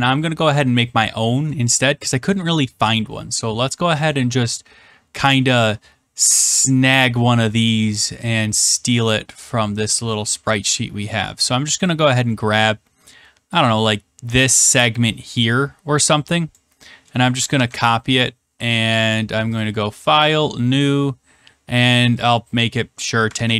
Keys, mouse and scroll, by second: 0.5 middle click, 0.6 middle click, 1.6 middle click, 1.9 middle click, 2.0 middle click, 2.4 middle click, 8.3 click, 9.3 click, 10.0 middle click, 10.6 middle click, 16.4 click, 17.5 ctrl+c, 19.5 click, 20.2 click, 22.2 click, 23.3 ctrl+v.